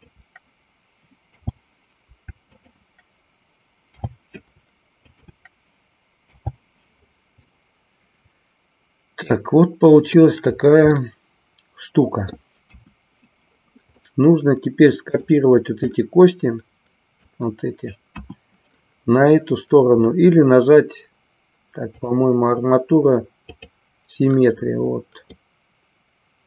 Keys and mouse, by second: 2.6 shift+click, 5.0 shift+click, 7.6-10.2 middle drag, 11.0-12.3 middle drag, 12.7 KP_1, 14.0-15.4 middle drag, 15.8-17.4 drag, 18.1 KP_1, 22.1-23.7 drag, 25.3-26.4 middle drag.